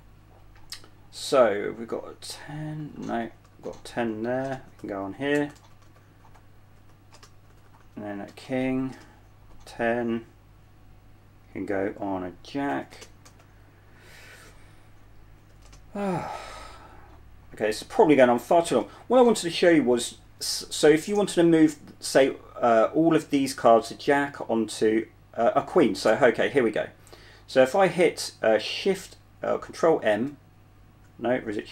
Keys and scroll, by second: 0.0-0.2 typing, 2.1-9.8 typing, 13.0-13.5 typing, 15.7-16.3 typing, 17.7-19.1 typing, 30.4 ctrl+m.